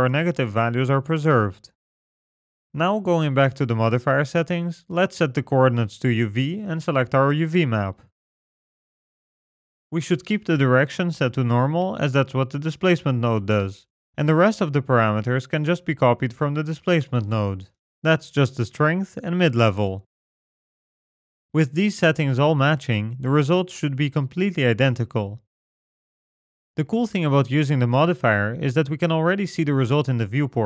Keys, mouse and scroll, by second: 1.0 click, 3.4 click, 4.9 click, 7.6 click, 14.8-18.3 scroll up 14, 15.6 middle click, 19.7 click, 22.8-23.1 scroll down 2, 23.1-23.8 scroll up 7, 23.8 middle click, 26.6-27.8 scroll down 7, 27.2 middle click, 27.8-28.3 scroll up 9, 28.6 middle click, 29.8 middle click, 30.5 scroll down 4.